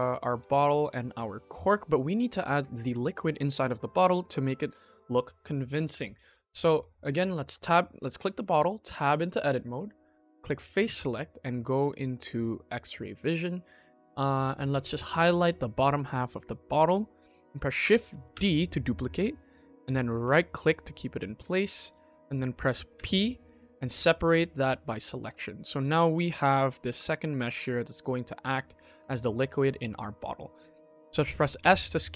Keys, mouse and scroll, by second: 0.1 KP_1, 0.3-0.7 scroll down 2, 0.7-1.0 scroll up 3, 1.3-1.6 shift+middle drag, 2.2 ctrl+s, 2.5 shift+middle drag, 6.2 click, 6.6-6.9 shift+middle drag, 7.4 Tab, 10.1 click, 12.5 click, 13.0 shift+middle click, 13.7 KP_1, 14.2 shift+middle click, 14.2 shift+middle click, 14.3 shift+middle click, 14.9-16.7 drag, 18.3 shift+d, 22.8 p, 25.1 Tab, 25.4 click, 25.7 click, 25.9 middle click, 26.3 click, 26.7 g, 28.6 scroll down 1, 28.9 KP_1, 29.2-29.6 scroll up 3, 29.7-31.4 shift+middle drag, 31.5 5.